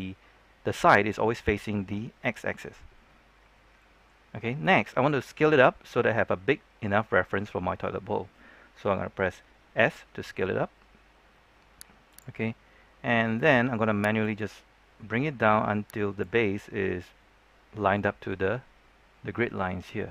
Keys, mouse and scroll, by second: 4.1-4.5 scroll up 1, 4.5-8.0 scroll down 1, 9.8 s, 12.0 click, 12.4-12.7 scroll down 1, 12.8 scroll up 1, 13.0 middle click, 14.1-16.5 drag, 18.1 middle click, 18.2 scroll down 1, 18.4-19.7 middle drag, 19.7-20.1 scroll down 1.